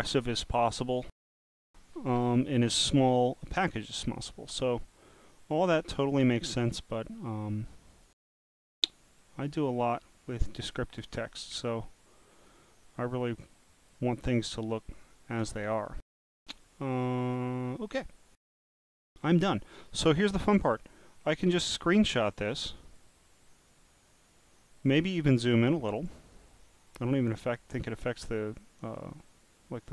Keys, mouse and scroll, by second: 3.5-6.3 drag, 7.3 click, 9.2 scroll down 1, 9.2 scroll down 1, 9.3 scroll down 1, 9.6 scroll up 4, 10.2 scroll down 2, 11.1 click, 12.1 click, 13.5 click, 20.8 click, 22.9 click, 24.8 click, 25.7 scroll down 1, 25.7 scroll down 1, 25.8 scroll down 1, 25.8 scroll down 1, 26.0 scroll down 1, 28.1 scroll up 3, 28.6-28.9 scroll down 1, 29.2 scroll up 2, 29.7-29.9 scroll down 1.